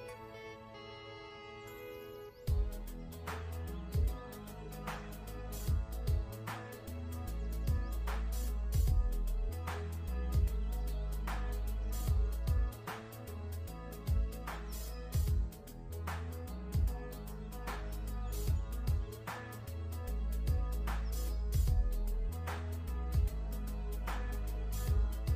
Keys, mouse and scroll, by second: 0.2 click, 19.7 scroll down 1, 21.5 click, 21.9 shift+click, 22.4-24.2 typing, 23.5 shift+click, 24.3 click.